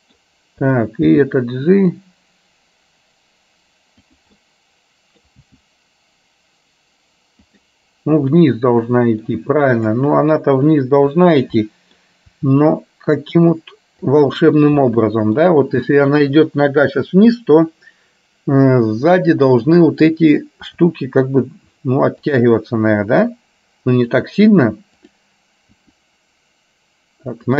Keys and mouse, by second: 0.7 click, 1.2 g, 4.5 middle click, 5.5 g, 8.5 middle click, 10.0 click, 11.2 click, 11.7 middle click, 12.3 r, 15.0 middle click, 19.7 click, 20.8 r, 23.0 r.